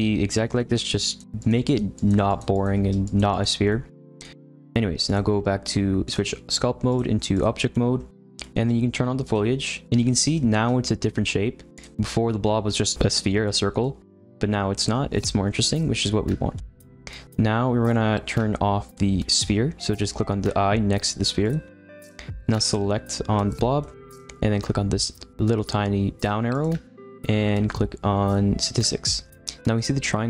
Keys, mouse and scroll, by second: 1.0-3.7 drag, 3.7-5.0 middle drag, 5.0 click, 6.8-7.7 drag, 7.7-9.2 middle drag, 9.2 click, 9.8-10.3 scroll down 2, 10.3-11.7 shift+middle drag, 11.7 click, 13.8-19.7 middle drag, 21.4 click, 22.6 click, 23.8-26.5 shift+middle drag, 26.5-30.2 drag.